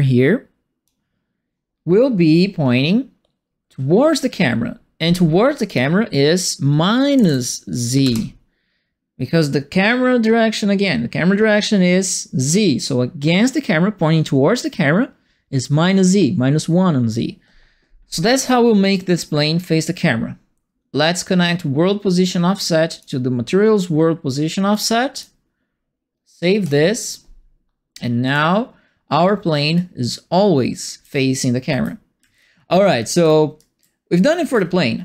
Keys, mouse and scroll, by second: 5.6 click, 7.1 KP_Subtract, 8.0 KP_Add, 18.9 right click, 22.0 click, 24.7 right click, 26.6 click, 28.2 click, 29.7-35.0 right drag, 30.7-34.8 typing.